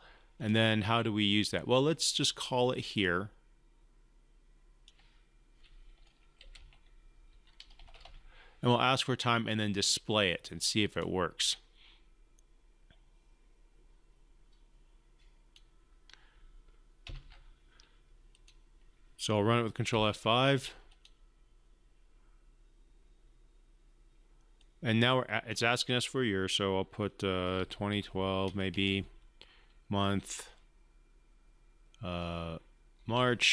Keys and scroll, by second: 17.1 ctrl+F5, 20.2 ctrl+F5.